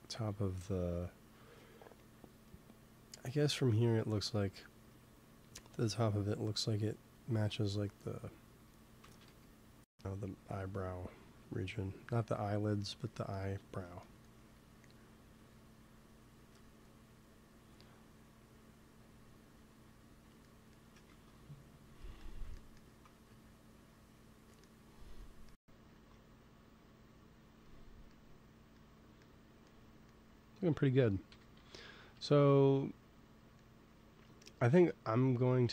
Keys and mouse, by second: 5.1-6.9 drag, 7.8 f, 8.3-14.3 drag, 9.0 ctrl+z, 9.2 f, 14.5 f, 15.4-22.0 drag, 21.0 ctrl+s, 23.0 f, 23.7-25.7 drag, 25.8 ctrl+s, 31.2 KP_1, 32.0 KP_3.